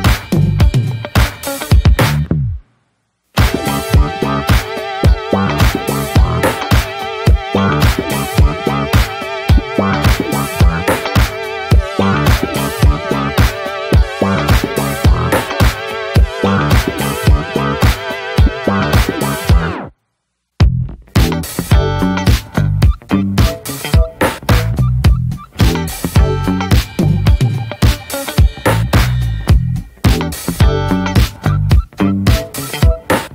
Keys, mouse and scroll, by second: 0.1 click, 0.7 ctrl+a, 1.9 shift+s, 3.9 click, 4.5 shift+click, 5.4-8.9 right drag, 8.9 click, 9.2 click, 10.2 shift+s, 11.8-12.3 shift+middle drag, 12.3 drag, 12.6 middle click, 13.0 click, 13.2 Tab, 13.5 a, 14.8 alt+middle click, 15.7 shift+middle click, 15.9 scroll up 1, 16.1-17.7 middle drag, 17.7 3, 18.9 e, 22.6 Tab, 22.9-23.4 middle drag, 23.4 click, 23.6-24.7 right drag, 24.7-26.5 shift+middle drag, 26.5-27.4 drag, 28.7-31.8 drag, 33.1-33.3 drag.